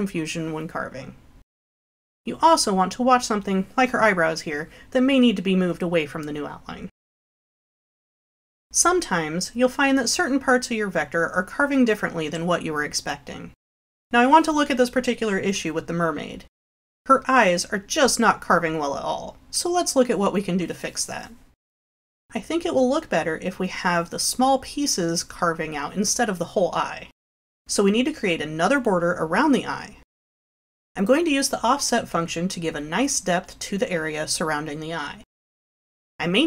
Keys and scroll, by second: 2.4 Delete, 5.2 Up, 6.0 Up.